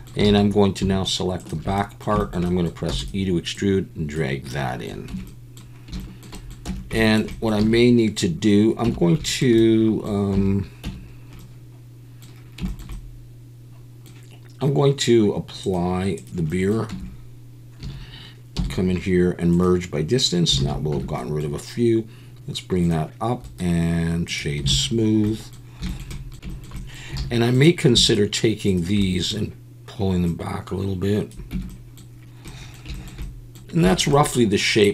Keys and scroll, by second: 0.3 alt+a, 2.9 e, 5.1 Tab, 5.1 `, 6.6 Tab, 7.6 a, 8.8 Tab, 10.3 Tab, 10.8 Tab, 16.9 Tab, 17.8 a, 18.5 m, 20.6 alt+a, 20.9 Tab, 24.7 alt+a, 26.3 Tab, 27.2 alt+a, 31.5 Tab.